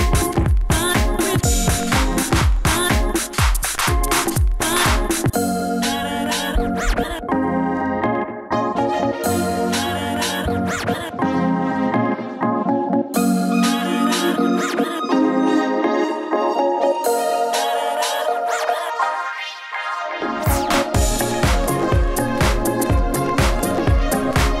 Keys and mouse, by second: 2.0 s, 2.8 s, 3.9-4.4 drag, 4.4-5.1 middle drag, 5.2 middle drag, 6.3 s, 6.4 f, 7.4 shift+f, 8.1 s, 9.4 s, 10.7 s, 12.8 s, 13.4 f, 19.6 middle click, 21.6-23.1 drag, 23.1 s.